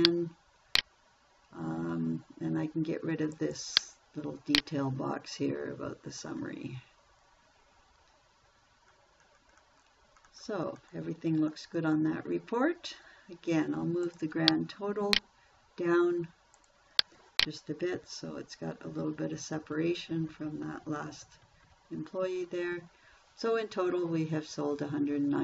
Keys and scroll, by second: 6.7 Delete, 18.3 Down.